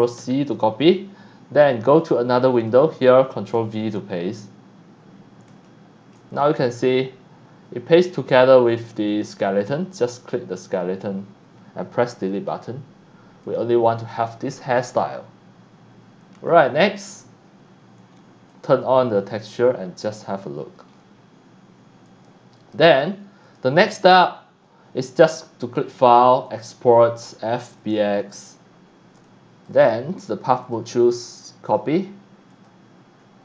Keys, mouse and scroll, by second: 0.2 ctrl+c, 2.0 click, 2.6 click, 3.7 ctrl+v, 4.2 scroll up 1, 4.8 scroll up 1, 5.6-6.1 shift+middle drag, 6.4 middle drag, 7.9-8.3 drag, 8.7 scroll up 1, 9.1 click, 10.2 click, 13.4 click, 14.7-15.5 middle drag, 18.5 click, 20.9 scroll down 1, 22.1 click, 23.4 click, 25.6 click, 26.5 click, 27.8 click, 29.2 click, 30.6 click, 31.7 click, 32.5 click.